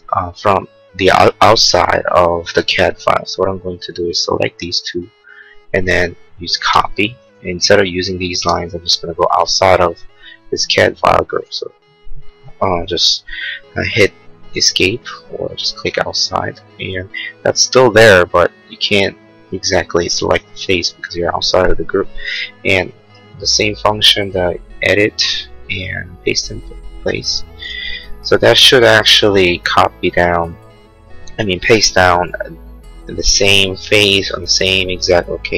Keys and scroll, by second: 6.7 ctrl+c, 8.3 space, 11.4 Escape.